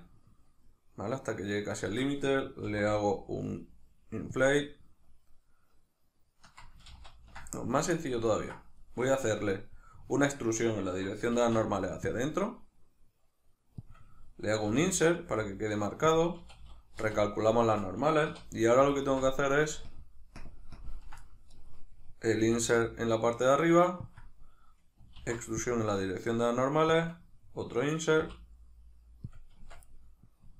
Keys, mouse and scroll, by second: 1.9 shift+click, 4.4 click, 6.9 ctrl+z, 8.2-13.9 ctrl+middle drag, 11.4 alt+e, 13.9 click, 16.2 click, 16.4 a, 17.0 shift+n, 17.6-18.9 shift+middle drag, 18.3 3, 18.9 alt+right click, 19.9 ctrl+KP_Add, 20.4 ctrl+KP_Subtract, 21.7-24.2 middle drag, 24.2 click, 25.2 alt+e, 27.1 click, 29.4 click, 29.6 Tab, 29.9-30.5 middle drag.